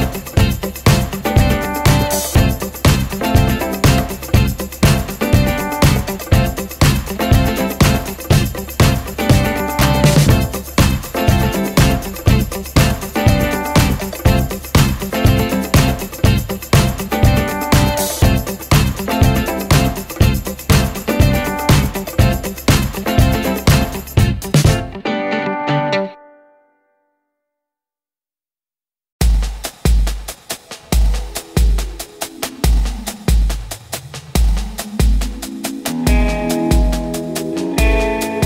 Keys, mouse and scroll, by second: 0.0-0.4 scroll up 1, 0.7 click, 3.8 shift+right click, 4.9 click, 8.5 shift+Num_Lock, 8.5 click, 9.6 scroll up 1, 9.9 ctrl+space, 10.1 ctrl+a, 11.1 F8, 11.4 click, 12.1 Home, 12.2 shift+End, 12.8-16.0 typing, 17.0-20.7 drag, 20.7-21.2 scroll down 1, 21.2 click, 22.1-22.5 scroll down 1, 22.5 click, 24.3 ctrl+z, 24.9-27.7 drag, 27.7 right click, 28.1 scroll up 1, 30.5 click, 31.4 ctrl+space, 31.7 ctrl+a, 33.1-35.4 typing, 38.0 shift+-.